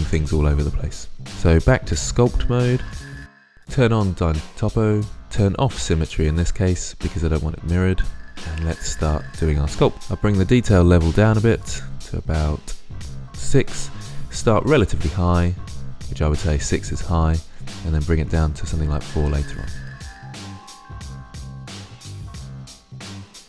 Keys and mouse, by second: 3.4-8.2 drag, 9.9 click, 11.1-12.9 drag, 19.8-20.5 drag, 20.7 drag, 21.1 click, 21.7-22.2 drag, 22.6 middle click, 23.1 middle drag, 23.3 middle click.